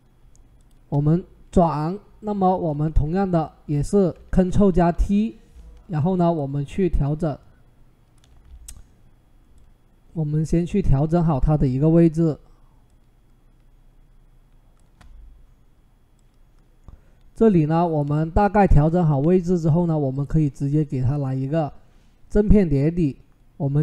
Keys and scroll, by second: 4.6 ctrl+t, 19.8 Return.